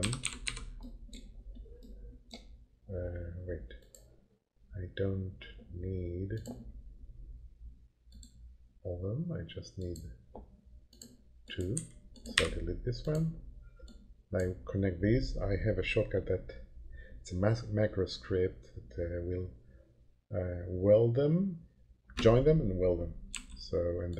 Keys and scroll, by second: 0.0-0.9 typing, 11.7 Delete, 23.3 h.